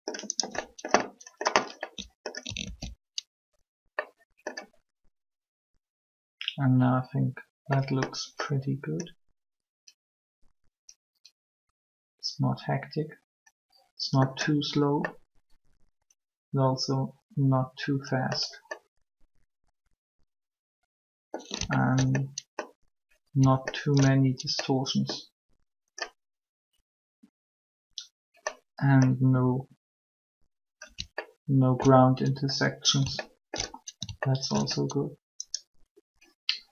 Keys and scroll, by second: 2.6 alt+a.